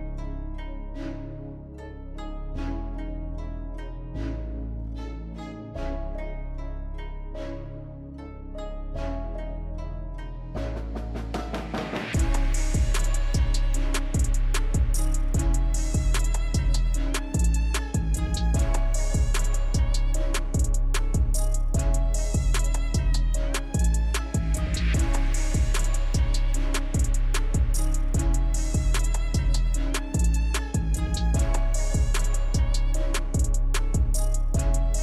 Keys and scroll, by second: 0.1 ctrl+-, 0.9 ctrl+a, 2.8 ctrl+c, 5.1 alt+Tab, 5.1 ctrl+v, 5.9 ctrl++, 6.0 ctrl++, 6.2 ctrl++, 6.3 ctrl++, 8.2 ctrl++, 10.4 ctrl+-, 10.5 ctrl+-, 10.7 ctrl+-, 11.6 Delete, 12.7 ctrl+-, 12.8 ctrl+-, 12.9 ctrl+-, 13.7 ctrl+c, 13.7 ctrl+v, 13.7 ctrl+a, 18.0 ctrl+c, 18.2 ctrl+v, 21.6 Delete, 28.0 Delete, 30.0 Right, 30.3 Right, 32.1 ctrl+-, 32.3 ctrl+c, 32.3 ctrl+v.